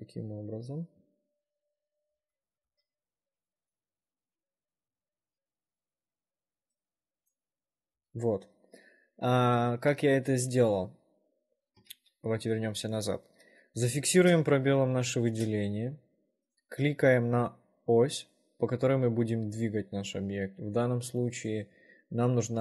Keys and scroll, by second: 0.0 w, 5.4 space, 5.5 s, 8.2 s, 12.1 ctrl+z, 14.3 space, 15.5 space.